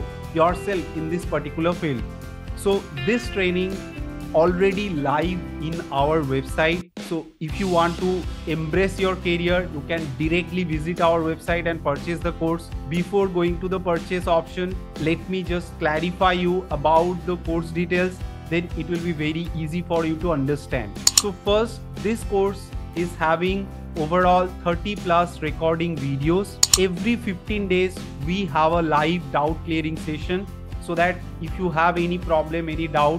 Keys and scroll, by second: 18.3 ctrl+a.